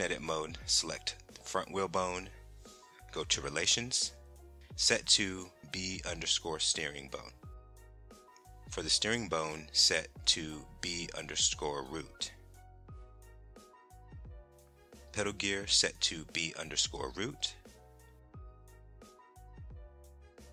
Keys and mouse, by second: 1.5 click, 2.6-6.1 drag, 9.5-12.0 drag, 16.2-18.3 drag, 20.0 click.